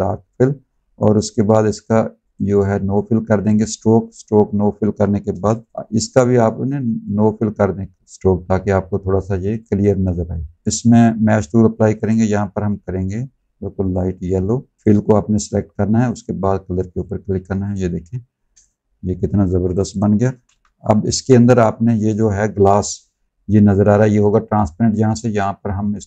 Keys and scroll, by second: 5.2 v, 19.5 alt+z, 20.8 v.